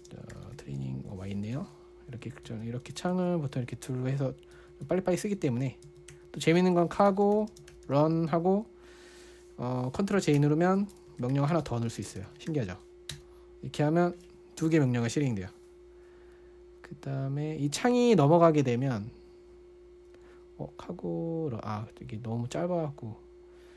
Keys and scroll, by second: 0.0-1.5 typing, 2.0 super+1, 2.6 super+2, 2.9 super+1, 3.2 super+2, 3.5 super+1, 3.9 super+2, 4.3 super+1, 5.0 super+2, 5.2 super+1, 5.8 super+2, 6.3 super+1, 6.5 super+2, 7.0-8.8 typing, 10.8 ctrl+j, 11.3-14.0 typing, 19.2 typing.